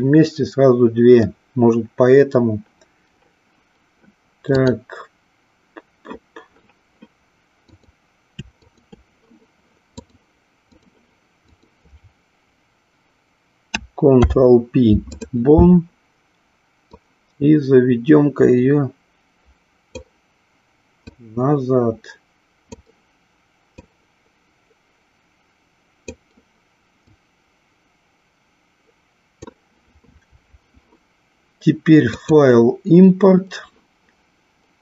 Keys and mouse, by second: 4.6-6.2 drag, 7.6 click, 8.6 shift+click, 9.9 click, 14.0 ctrl+p, 16.8-20.3 drag, 21.0-22.9 drag, 23.7-26.2 drag, 27.0-29.4 drag, 32.0-34.8 drag.